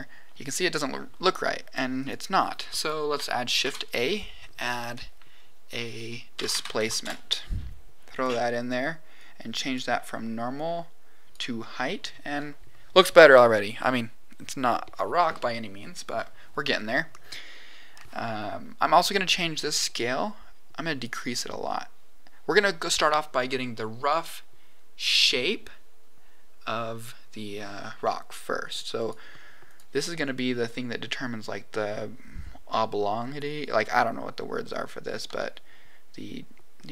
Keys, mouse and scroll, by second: 1.9 click, 2.7 click, 3.6 shift+a, 9.1 click, 10.5 click, 17.2-17.9 scroll up 4, 19.5-21.0 drag, 28.3 click, 28.9 click, 30.2 middle click, 33.9-35.8 drag.